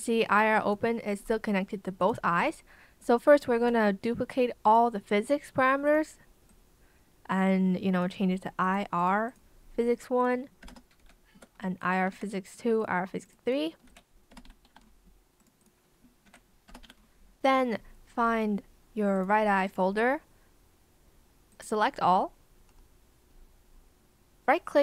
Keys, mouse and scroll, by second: 3.2 shift+click, 10.6 BackSpace, 11.0 r, 11.3 space, 12.1 ctrl+c, 13.8 ctrl+v, 14.3 BackSpace, 14.6 KP_2, 14.8 Return, 16.2 ctrl+v, 16.6 BackSpace, 16.8 KP_3, 16.9 Return.